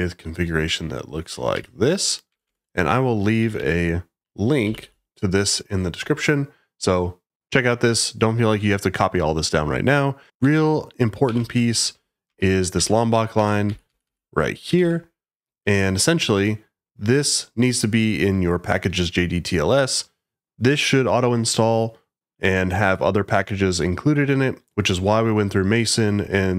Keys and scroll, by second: 1.5 super+v, 2.2 Escape, 2.4 Escape, 3.4-5.2 typing, 10.4-12.2 typing, 12.7 Return, 13.3-14.8 typing.